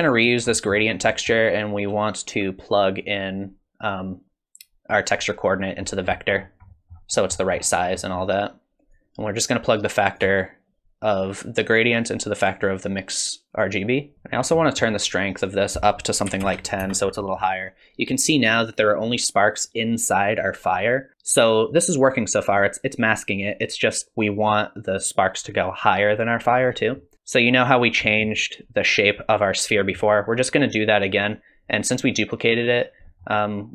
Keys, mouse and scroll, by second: 0.5 middle click, 1.0 middle click, 3.0 click, 5.5 middle click, 6.0-6.7 scroll up 10, 6.7 middle click, 7.1-7.8 scroll up 2, 7.4 middle click, 7.8-8.9 scroll down 4, 8.0 middle click, 8.9 click, 14.1 middle click, 14.1-15.4 scroll up 7, 14.6 middle click, 15.4 click, 27.0 middle click, 29.7 middle click, 33.1 middle click.